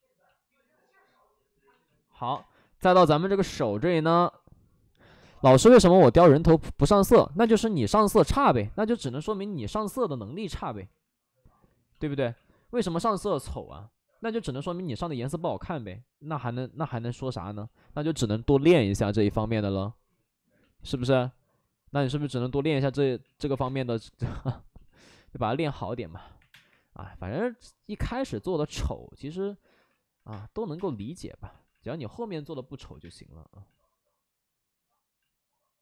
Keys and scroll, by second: 2.2 space, 2.7 3, 2.7 space, 7.3 space, 8.6 space, 9.4 ctrl+z, 10.1 alt+s, 10.8 5, 12.0 alt+s, 13.2 ctrl+z, 14.8 ctrl+z, 15.1 alt+s, 16.8 3, 17.5 ctrl+z, 18.1 5, 20.8 3, 21.0 3, 23.7 space, 24.8 alt+s, 26.3 3, 26.4 space, 30.2 space, 30.7 space, 30.9 3, 32.9 space.